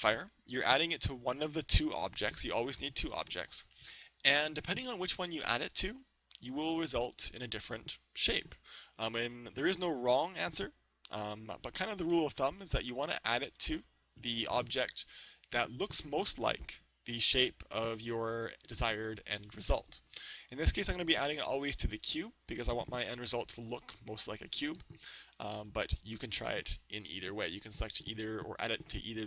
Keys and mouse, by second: 0.9-2.8 middle drag, 5.8 right click, 10.2-20.1 right drag, 22.0-25.5 right drag, 24.8 Tab, 25.4 Tab.